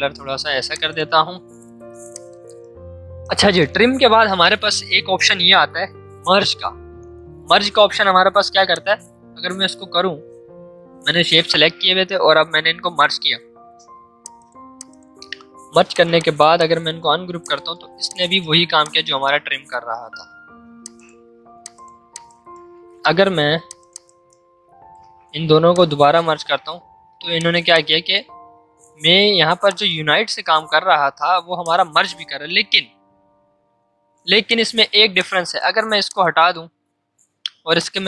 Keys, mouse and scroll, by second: 8.7 click, 14.2 click, 15.1 right click, 15.9 click, 19.4 ctrl+z, 20.8 click, 21.0 ctrl+z, 21.6 click, 22.7 ctrl+z, 23.6 click, 26.6 ctrl+z, 27.3 click, 30.5 ctrl+z, 31.6 click, 32.2 ctrl+z, 34.4 click, 37.7-38.0 alt+drag.